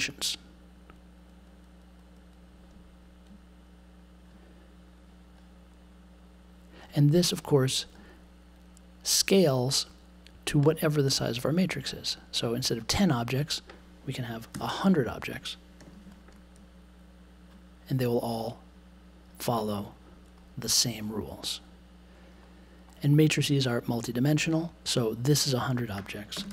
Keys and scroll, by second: 14.5 0, 15.8 super+j, 26.3 space, 26.4 1.